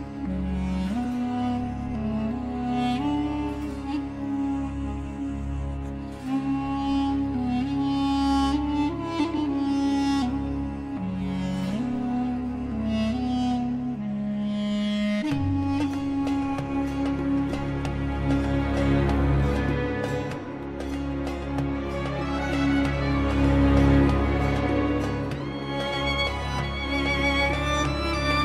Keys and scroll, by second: 8.5 ctrl+z, 8.7 space, 14.1 space, 14.3 Escape, 20.1 F4, 24.6 F2.